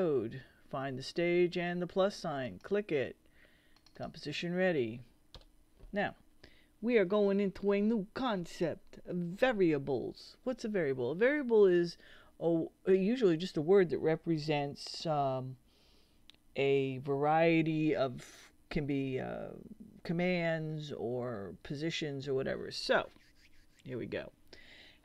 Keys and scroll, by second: 5.3 BackSpace.